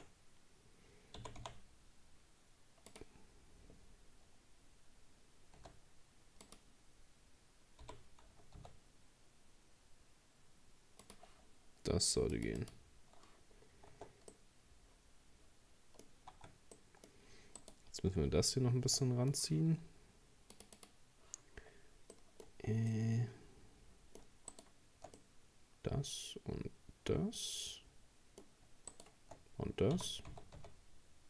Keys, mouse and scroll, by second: 1.2 g, 5.6 s, 7.8 g, 12.3-13.5 drag, 13.5-13.9 scroll down 4, 13.9 Tab, 14.3-16.1 middle drag, 16.1 scroll up 1, 16.3 Tab, 16.8 middle click, 17.1 scroll up 2, 17.6 right click, 19.0-20.5 middle drag, 20.5-22.1 drag, 22.1 middle click, 22.5 scroll up 4, 22.9-24.5 middle drag, 24.5 shift+right click, 25.2-28.2 middle drag, 28.9 shift+right click, 30.0 g.